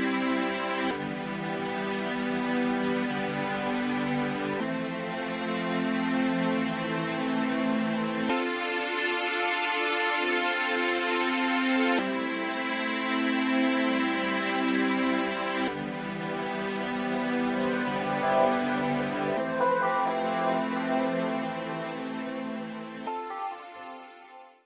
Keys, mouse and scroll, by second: 2.5 middle click, 10.4 right click, 12.6 middle click, 16.6 click, 22.1 middle click.